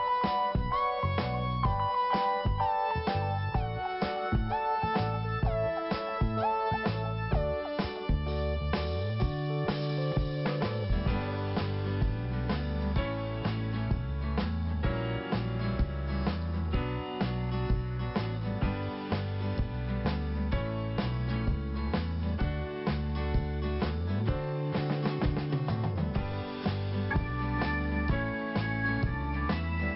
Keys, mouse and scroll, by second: 0.7 click, 2.1-2.4 scroll down 1, 3.5 scroll up 1, 4.1 scroll up 1, 4.5 click, 4.6 click, 12.4 click, 13.8 scroll up 1, 14.5 click, 17.5 click, 17.6 click, 18.8 click, 18.9 click, 20.3 click, 25.0 click, 26.2 scroll down 1, 27.5 scroll down 1, 28.0 click, 29.6 click.